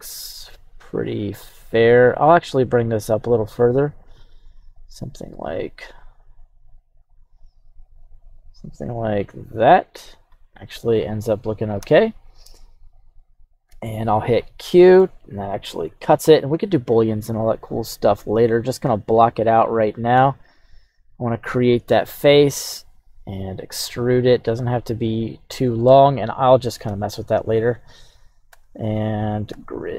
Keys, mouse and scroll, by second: 13.8 scroll down 1, 13.8-15.0 middle drag, 15.8 click, 17.9 click, 18.7-21.3 drag, 23.2 e, 25.1 click, 26.9 KP_3, 27.5 right click, 28.5 Tab, 29.1 right click, 29.5 q.